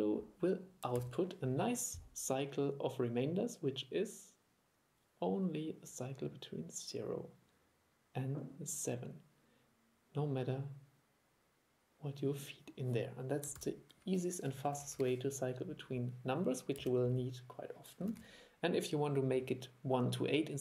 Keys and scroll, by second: 1.1 super+e, 13.7 super+e, 18.2 super+1.